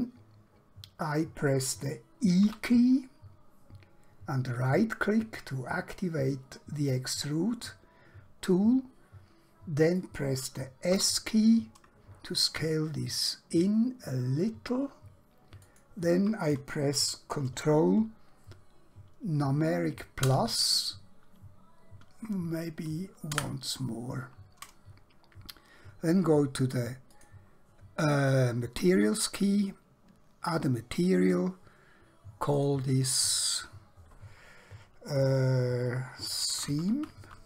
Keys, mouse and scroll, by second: 2.5 e, 4.6 right click, 8.5 middle click, 11.1 s, 15.7 shift+click, 20.3 ctrl+KP_Add, 27.1 click, 32.6 click, 36.3 shift+Num_Lock, 36.4-37.4 typing.